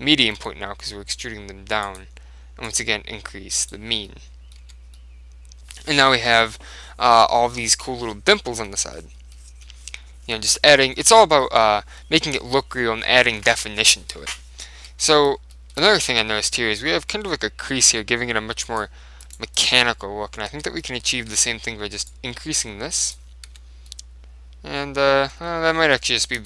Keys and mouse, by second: 0.5 s, 2.0-4.4 drag, 4.2-6.8 middle drag, 4.7 Tab, 7.2-11.2 middle drag, 11.7-13.6 middle drag, 15.0 Tab, 15.6-17.4 middle drag, 18.8 click, 19.3-21.6 right drag, 20.6 Tab, 20.9-22.7 middle drag, 21.4 Tab, 22.2 click, 23.6 Tab, 24.0-25.4 middle drag, 26.0 ctrl+z.